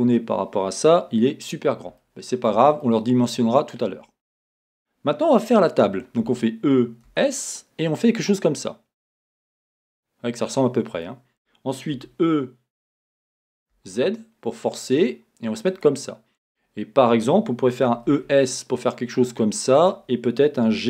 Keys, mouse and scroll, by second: 0.9-2.0 scroll, 2.0-9.6 shift+middle drag, 4.0-5.7 scroll, 6.2 e, 9.6 click, 10.0-15.8 middle drag, 12.0 e, 15.8 click, 17.8 e, 19.9 click, 20.7 g.